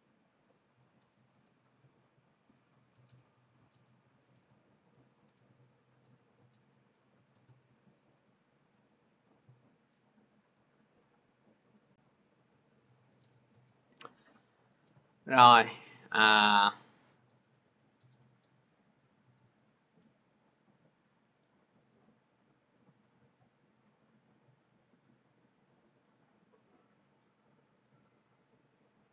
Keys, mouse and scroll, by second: 2.6 click, 9.3 click, 12.7 click, 15.8 click, 18.8 click, 21.7 click, 25.5 click.